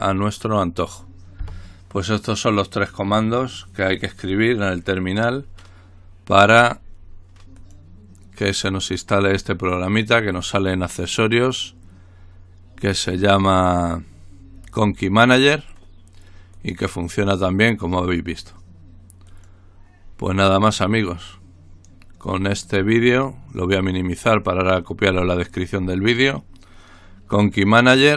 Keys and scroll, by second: 0.0-0.2 typing, 1.4 typing.